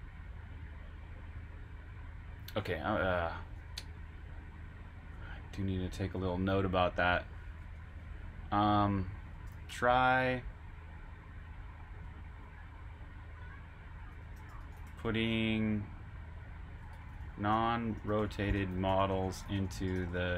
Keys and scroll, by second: 3.5 super+Tab, 6.1 super+`, 7.6 Return, 9.2-10.1 typing, 11.9 typing, 13.8-15.4 typing, 16.6-20.3 typing.